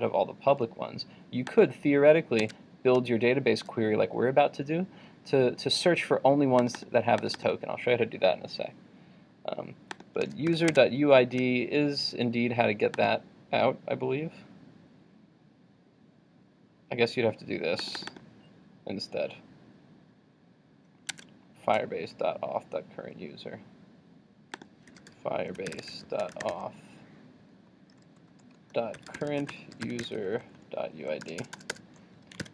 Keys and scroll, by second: 2.4 super+Tab, 10.7 super+Tab, 21.1 super+Tab, 32.4 super+s.